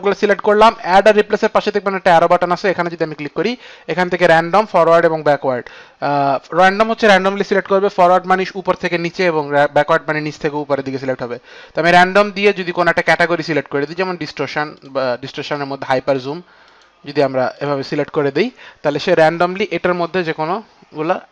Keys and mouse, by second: 12.6 click, 13.1 click, 14.8 click, 16.0 click, 17.7 click, 18.2 click.